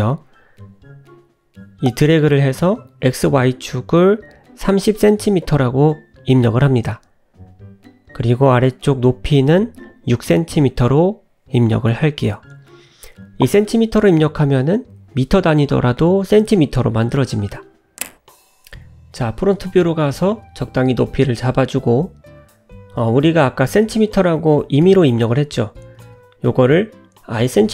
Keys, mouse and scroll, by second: 0.7 click, 7.0 click, 11.1-12.1 scroll up 5, 12.1 scroll up 2, 12.4 middle click, 13.0-13.3 scroll up 1, 14.3 `, 15.4 g, 16.4 `, 17.0 `, 18.6 scroll up 3, 19.1 g, 20.6 middle click, 20.6 scroll down 1, 23.9 click, 24.5 click, 27.0 click.